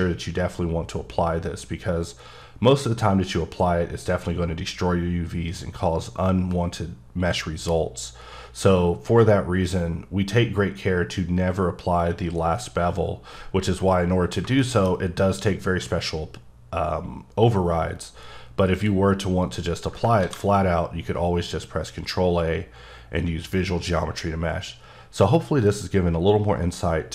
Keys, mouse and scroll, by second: 1.7 scroll down 3, 3.1-3.8 scroll down 1, 13.2-14.6 scroll down 9, 14.6 shift+middle click, 18.7 click, 19.4 click, 20.2 ctrl+a.